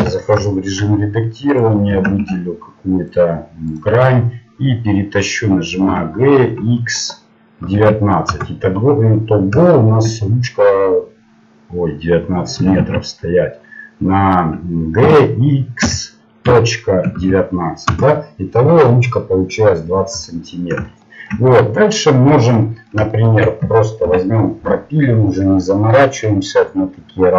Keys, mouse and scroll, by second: 0.0 Tab, 1.6 right click, 3.2 ctrl+Tab, 5.9 g, 9.0 middle click, 12.8 ctrl+z, 15.0 g, 18.8-24.8 middle drag, 24.0 ctrl+r.